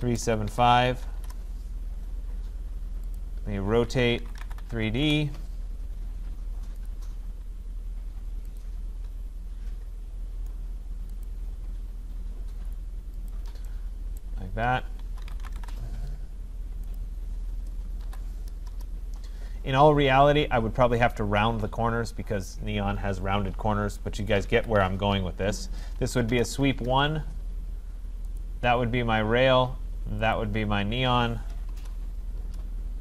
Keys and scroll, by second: 1.2 Return, 15.6 Return, 24.4 Escape, 27.3 Return.